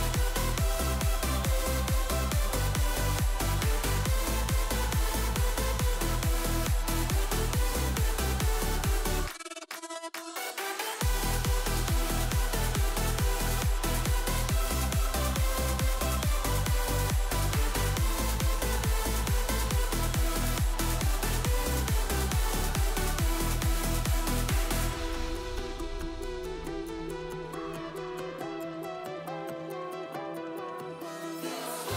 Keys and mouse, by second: 1.1-3.4 drag, 2.7 0, 2.9 0, 5.3-6.9 drag, 7.4 click, 12.5 shift+a, 13.8 g, 15.6 ctrl+z, 15.8 ctrl+z, 16.1 shift+s, 16.9 shift+a, 18.5 g, 19.8 KP_7, 21.4 click, 22.4 click, 26.7 g, 28.0 shift+d.